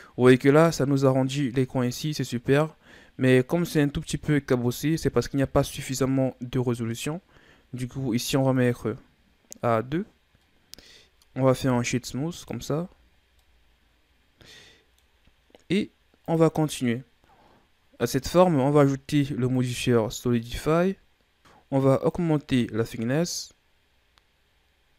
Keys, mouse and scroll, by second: 3.7-4.1 shift+scroll down 2, 4.4-6.7 scroll up 2, 8.5-11.5 drag, 11.5 w, 13.2 scroll down 1, 13.4-16.2 middle drag, 16.2 click, 16.8-19.5 middle drag, 19.5-21.4 drag, 21.4 middle click, 22.0-24.9 drag.